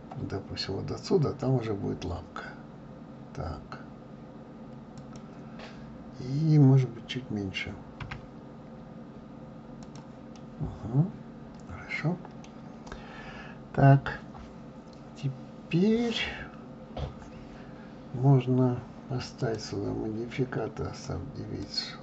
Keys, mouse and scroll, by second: 8.0 s, 10.4-13.3 middle drag, 19.4-22.0 drag.